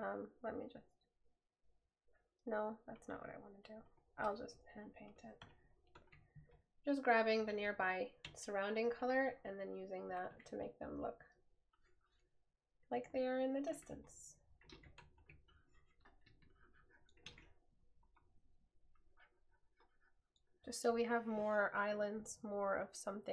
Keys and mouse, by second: 4.6 right click.